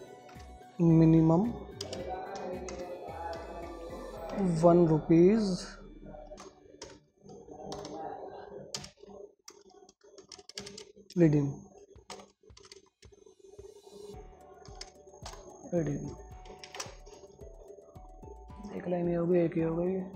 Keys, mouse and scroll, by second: 0.0-1.1 typing, 2.2 space, 3.7 /, 6.3-10.9 typing, 12.2-13.6 typing, 14.9-15.6 typing, 17.0 ctrl+space, 18.0 click, 18.0-20.1 drag.